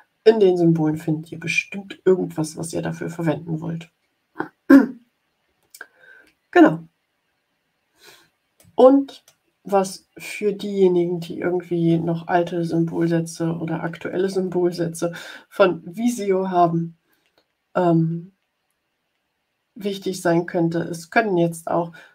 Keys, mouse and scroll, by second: 6.5 ctrl+scroll down 2, 7.5 ctrl+scroll down 2, 8.6 click.